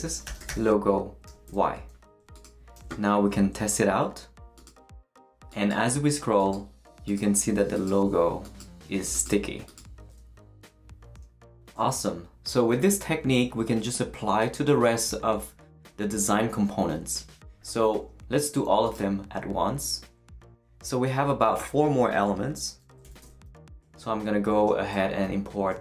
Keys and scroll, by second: 0.0-1.3 typing, 1.5 Return, 2.7 super+s, 23.8 shift+space, 25.6-25.8 typing.